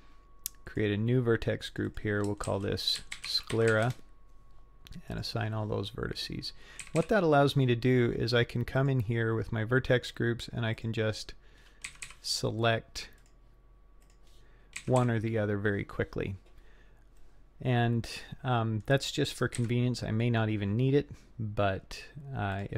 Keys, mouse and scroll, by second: 0.7 click, 1.7 click, 1.9-4.6 drag, 5.1 click, 6.8 a, 7.0 a, 8.8 click, 10.8 click, 11.9 a, 12.0 a, 13.2 click, 14.0 click, 14.8 a, 15.0 a, 17.2-18.8 middle drag, 19.6 KP_3, 21.8-22.2 scroll up 4, 22.6 click.